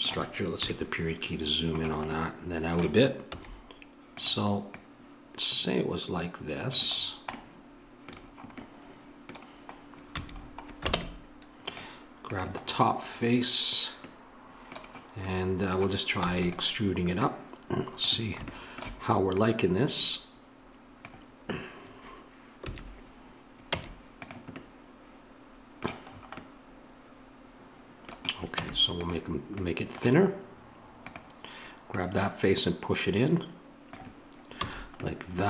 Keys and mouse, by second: 0.5 KP_Decimal, 3.3 s, 4.7-6.7 drag, 7.0 middle click, 10.1 a, 10.9 ctrl+Tab, 16.1 e, 17.2-21.0 drag, 22.6 a, 23.7 Tab, 28.5 Tab, 31.0-33.8 drag, 34.6 a.